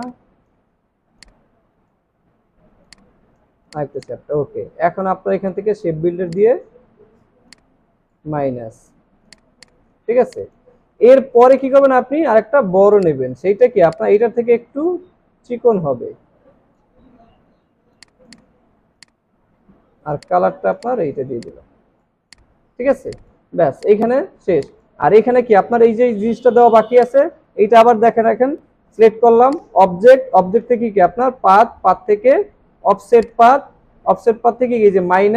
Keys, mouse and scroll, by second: 1.2 alt+click, 10.2 alt+scroll down 1, 11.9 alt+scroll up 1, 22.7 alt+scroll down 1, 23.0 space, 23.5 alt+scroll down 1, 23.7 space, 24.5 space.